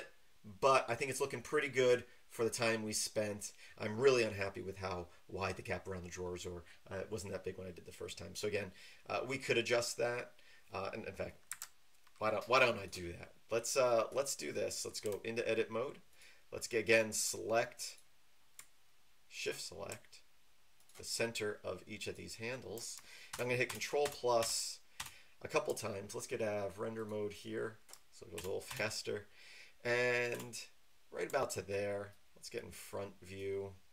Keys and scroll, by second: 11.5 Escape, 15.0 Tab, 23.3 ctrl++, 23.7 ctrl++, 24.0 ctrl++, 28.4 ctrl++, 28.7 ctrl++, 30.3 ctrl++.